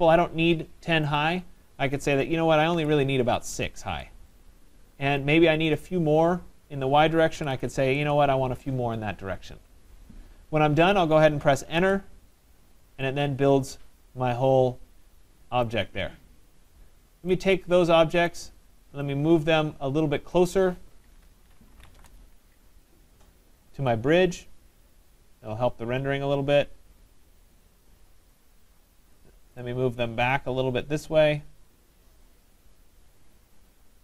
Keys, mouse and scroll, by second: 1.2 click, 2.8-3.5 typing, 5.8 click, 7.1-8.0 typing, 12.1 Return, 15.7 right click, 16.0 middle click, 16.1 middle click, 16.2-16.8 middle click, 16.6 middle click, 18.3 right click, 20.4 click, 21.4-22.4 typing, 23.9 click, 27.7 click, 28.0 click, 29.2 right click, 29.6 right click, 30.4 click, 33.9 click, 33.9 right click.